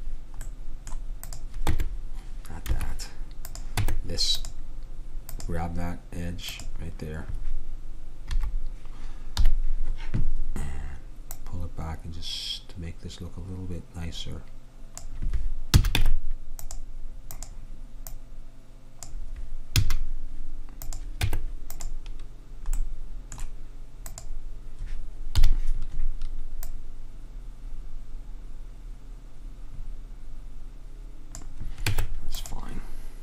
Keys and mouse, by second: 0.5-3.0 drag, 1.8 Tab, 3.8 Tab, 8.4 KP_1, 9.5 KP_3, 15.8 a, 16.1 Tab, 19.8 a, 21.3 Tab, 24.2-25.4 drag, 25.4 KP_3, 32.0 Tab.